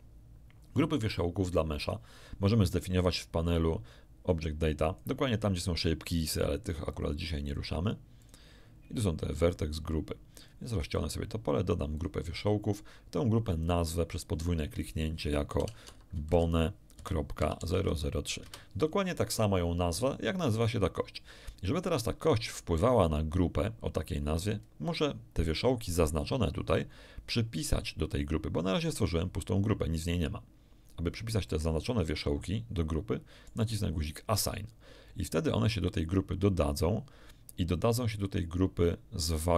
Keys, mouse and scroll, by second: 4.2 click, 6.9 click, 7.4 click, 8.2 click, 10.4 click, 11.9 click, 13.6 click, 15.6-17.7 typing, 18.4 Return, 31.4-33.6 middle drag, 35.8 click.